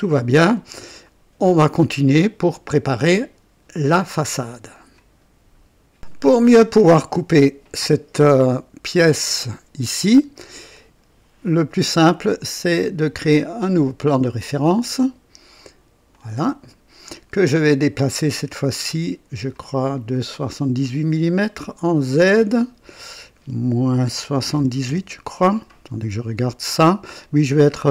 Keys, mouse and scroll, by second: 0.4-0.9 drag, 0.9-1.8 right drag, 2.2 click, 4.3-5.1 drag, 8.2-9.1 drag, 10.7-11.4 drag, 13.3 click, 16.1 click, 18.7-19.7 drag, 22.5 click, 23.9 KP_Subtract, 24.3 KP_7, 24.5 KP_8, 24.8 KP_Enter, 26.6 click, 27.6 scroll up 1.